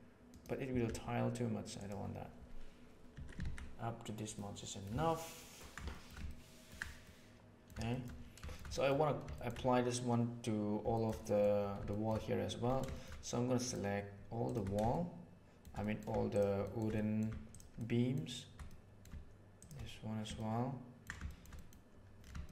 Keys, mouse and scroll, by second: 0.8 s, 3.1 Tab, 3.4 alt+a, 4.3 middle click, 5.0-5.5 ctrl+middle drag, 5.8 shift+middle drag, 6.2-6.6 ctrl+middle drag, 7.0-7.6 middle drag, 7.8 shift+middle drag, 8.4 shift+middle click, 8.6 middle drag, 9.2 shift+middle drag, 10.8 shift+middle click, 11.2 middle click, 11.8 shift+middle drag, 12.8 shift+middle click, 13.6 right click, 14.4 shift+right click, 14.8-15.5 shift+middle drag, 15.7 middle drag, 16.5 shift+middle drag, 16.8 middle drag, 17.4 shift+click, 17.7-18.1 shift+middle drag, 18.6-18.9 middle drag, 19.5 shift+click, 20.3-21.0 ctrl+middle drag, 21.2 shift+middle click, 21.5 middle click, 22.4-22.5 shift+middle drag.